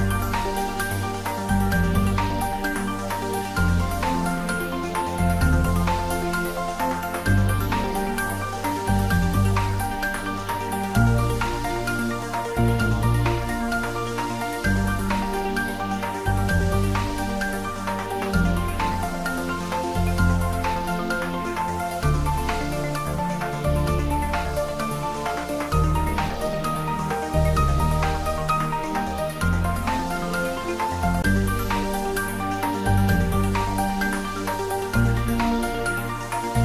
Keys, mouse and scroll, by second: 1.0 shift+click, 1.4 middle click, 2.7 click, 3.3 scroll down 1, 4.9-6.6 typing, 6.6 click, 7.7 g, 8.8 click, 9.0-9.9 typing, 10.8 click, 11.4 g, 12.9 click, 13.3 s, 13.6 x, 16.3 click, 17.0 g, 19.9 click, 20.3 scroll up 1, 22.3 g, 22.6 y, 23.4 x, 24.1 Left, 25.9 Down, 27.6 Right, 32.4 click, 32.9 scroll down 1, 34.6 s, 35.0 x.